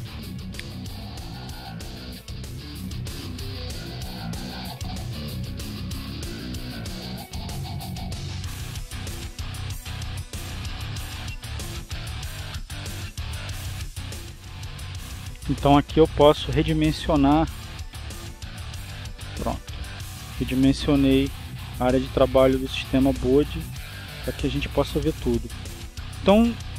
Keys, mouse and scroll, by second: 1.1-2.1 drag, 2.7-4.0 drag, 4.9 click, 9.9 click, 11.0-12.5 drag, 13.7 click, 15.1-19.8 drag, 20.3 click, 22.8 click, 24.4 click, 25.7-26.7 drag.